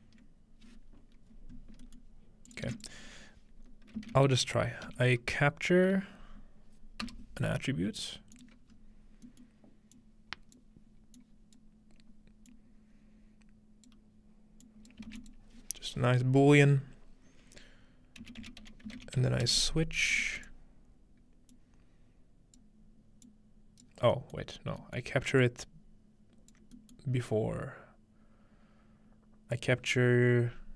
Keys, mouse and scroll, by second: 1.3-3.4 scroll up 3, 2.5 click, 2.7 shift+a, 2.8 shift+click, 4.0 c, 6.2-7.5 typing, 8.3-15.8 drag, 8.7-10.6 scroll up 1, 15.1 shift+a, 18.4-19.9 typing, 20.4 click, 21.5-22.6 drag, 23.3 click, 24.6 scroll down 1, 25.4-28.1 alt+drag, 29.5-30.7 drag.